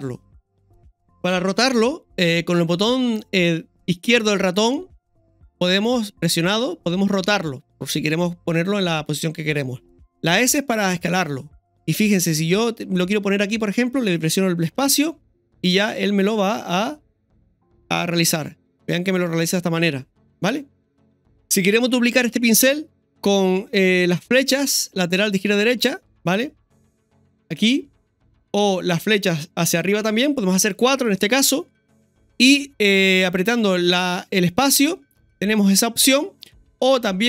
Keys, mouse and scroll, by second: 1.7-5.2 scroll up 3, 15.9-37.2 middle drag.